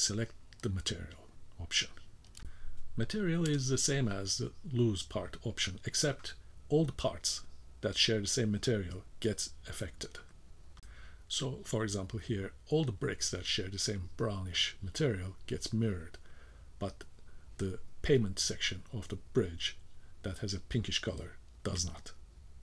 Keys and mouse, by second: 14.7 k, 15.8 v, 19.3 shift+middle drag, 19.8-20.2 middle drag, 20.8-21.6 shift+middle drag.